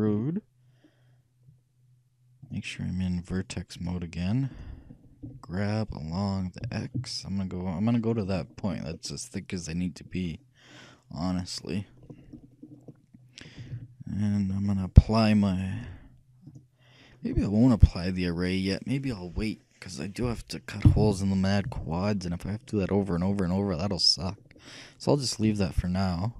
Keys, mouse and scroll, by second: 0.1 e, 3.9-5.6 drag, 5.3 g, 8.7-10.8 middle drag, 12.2-15.9 middle drag, 13.7 a, 13.8 a, 15.9-18.3 drag, 25.5 n.